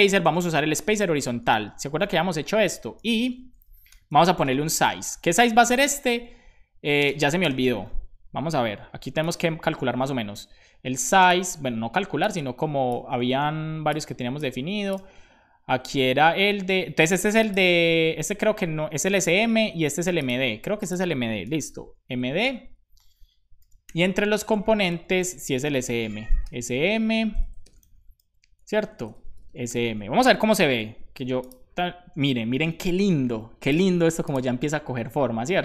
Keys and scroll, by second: 0.0-1.0 typing, 2.9 /, 3.4 Right, 4.4 space, 4.6 s, 5.8 space, 6.9 shift+space, 7.6 super+s, 21.6 d, 23.6 super+c, 24.0 Down, 24.7 super+Return, 24.8 super+v, 25.2 Left, 25.4 Left, 25.5 Left, 25.7 Left, 26.9 super+s, 26.9 Down, 27.3 super+Right, 27.6 Return, 28.2 super+v, 28.7 Left, 28.8 Left, 29.0 Left.